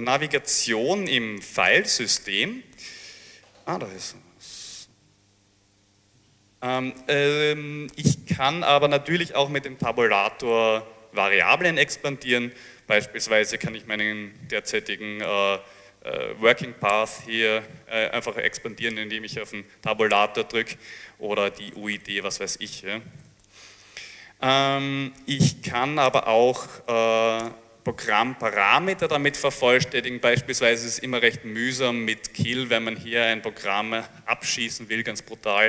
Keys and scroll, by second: 0.1-1.4 typing, 1.6 Return, 1.7 Return, 13.2-14.4 typing, 16.9 Tab, 20.2-22.2 typing, 23.3 ctrl+c, 26.2 Return, 26.6-27.8 typing, 30.5-31.5 typing, 33.2 typing.